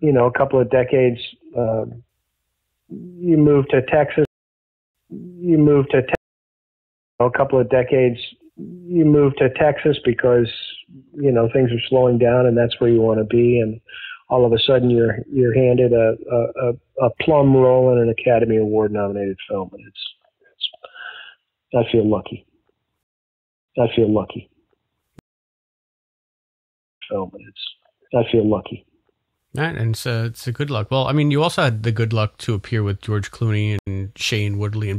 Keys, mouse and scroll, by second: 0.4 click, 2.5-4.2 drag, 4.1 space, 4.6 ctrl+shift+Delete, 4.8 space, 5.6 click, 6.0 space, 6.4 click, 7.0 click, 7.1 space, 7.4 click, 8.1 click, 9.1 click, 9.6 ctrl+s, 12.8-14.8 drag, 15.1 click, 16.0 click, 16.9 click, 18.6 click, 19.5 click, 21.8-22.9 drag, 22.9 space, 23.5 ctrl+shift+Delete, 23.6 space, 24.6 click, 25.1 space, 25.5-26.6 drag, 26.8 click, 26.9 space, 30.5-33.2 drag, 33.7 Delete.